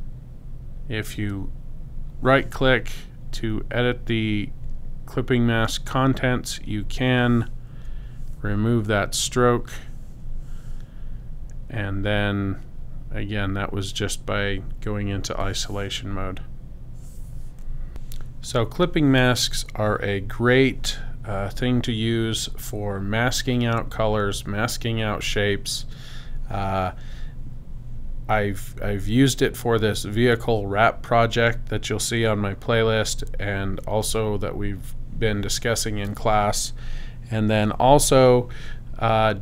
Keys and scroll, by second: 7.7 x, 9.2 /.